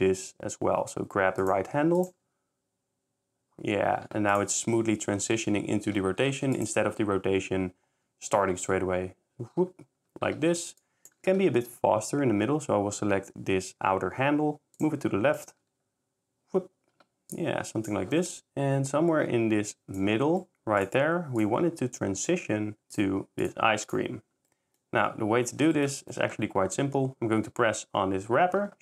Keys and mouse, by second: 2.0 click, 3.6 shift+s, 4.3 shift+click, 4.5 shift+s, 6.6 shift+click, 8.1 shift+s, 10.8 shift+drag, 11.2 shift+g, 11.4 x, 15.3 click, 17.3 shift+click, 20.8 click, 21.0 s, 22.9 click, 23.2 s, 23.4 click, 23.9-24.3 drag, 24.5 middle click, 25.7 s, 26.2 c, 26.3 ctrl+s.